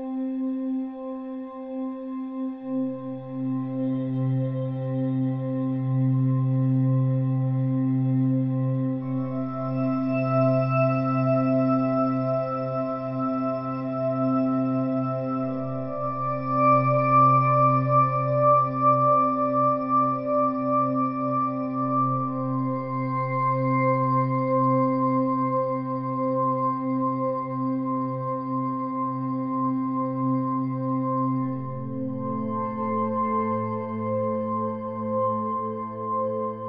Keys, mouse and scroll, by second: 4.8-8.1 drag, 8.3 ctrl+KP_Add, 10.7-13.9 drag, 21.4-23.5 drag, 26.1-27.9 drag, 28.5 ctrl+i, 31.1-33.9 drag, 33.5 a, 35.3-36.6 drag.